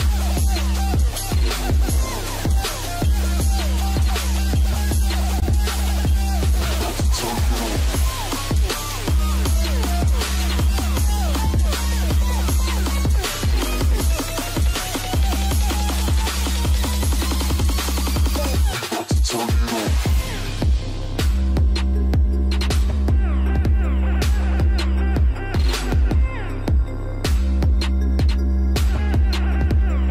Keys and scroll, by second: 1.2 ctrl+alt+space, 2.3 ctrl+alt+space, 16.0 ctrl+space, 20.1 ctrl+space, 21.0 ctrl+space, 26.2 ctrl+space, 26.9 ctrl+space.